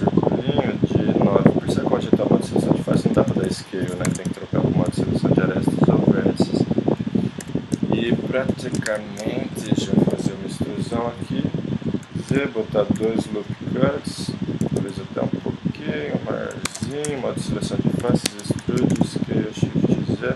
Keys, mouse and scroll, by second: 3.0-3.3 s, 3.5 s, 4.1 ctrl+Tab, 4.9 s, 7.4 KP_3, 8.3-10.1 drag, 8.9 KP_1, 10.1 e, 12.3 ctrl+r, 14.6 s, 16.7 ctrl+Tab, 17.2-18.2 drag, 18.0 e, 18.6 s.